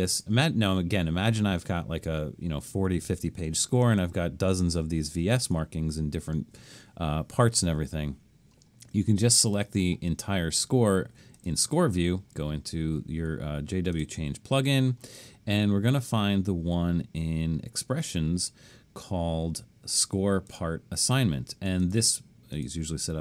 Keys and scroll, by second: 5.4 super+a.